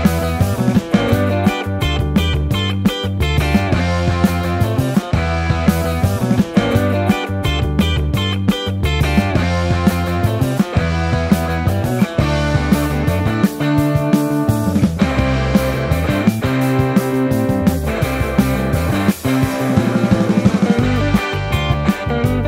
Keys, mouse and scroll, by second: 1.7 alt+2, 5.4 ctrl+x, 7.1 ctrl+x, 10.6 Tab, 10.9 Tab, 13.9 m, 14.9 shift+r, 15.2 shift+r, 16.1 Tab, 16.4 Tab, 16.6 ctrl+r, 16.9 ctrl+z, 17.3 ctrl+r, 17.8 Tab, 18.1 Tab, 19.5 ctrl+x, 19.9 2, 20.3 3, 20.8 2, 21.7 Tab, 22.0 Tab, 22.2 ctrl+r.